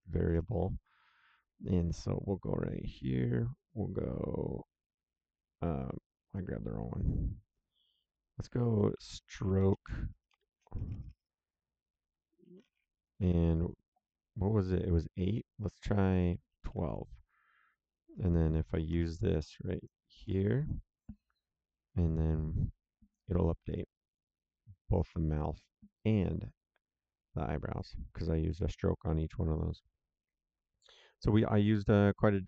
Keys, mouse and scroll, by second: 2.1 click, 6.3 click, 8.7-10.8 typing, 12.1-13.2 typing, 16.5 KP_1, 16.6 KP_2, 17.8 click, 18.8 ctrl+c, 19.7 click, 20.1 ctrl+v, 23.7 click.